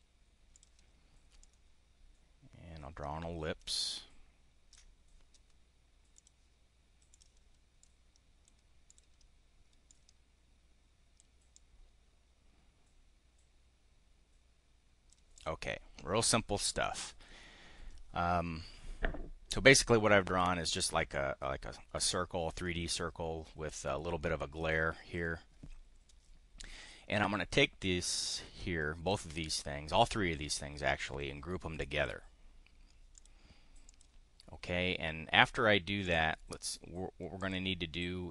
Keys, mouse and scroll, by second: 0.5 click, 1.3-4.8 ctrl+drag, 6.1 click, 7.1 click, 7.7 click, 8.8 click, 9.8-11.2 drag, 11.4-15.2 drag, 15.3 click, 28.2 click, 31.8 click, 33.2 click, 33.8 click, 36.0 click, 37.3 click.